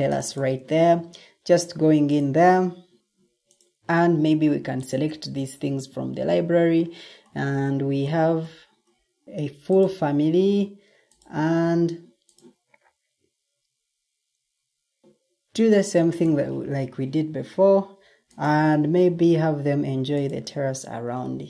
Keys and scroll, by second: 20.7 Escape.